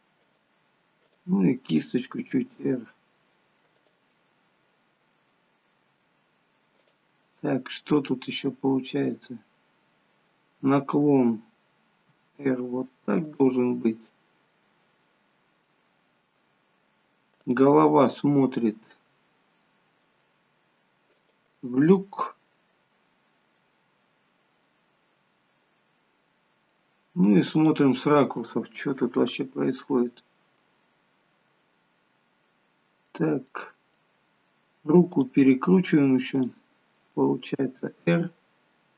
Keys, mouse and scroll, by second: 1.0 click, 2.3 r, 4.2 middle click, 5.2 scroll down 3, 5.4 middle click, 6.7 click, 7.2 middle click, 12.1 r, 13.7 middle click, 15.0 middle click, 16.4-17.3 scroll down 2, 17.3 click, 18.7 r, 21.4 middle click, 23.2-24.4 scroll down 3, 23.7 middle click, 27.5 click, 28.0 scroll down 3, 28.2 middle click, 29.4-30.1 scroll up 3, 30.1-30.6 scroll up 5, 31.4 middle click, 35.0 middle click, 35.0 click, 36.3 click, 37.7 r.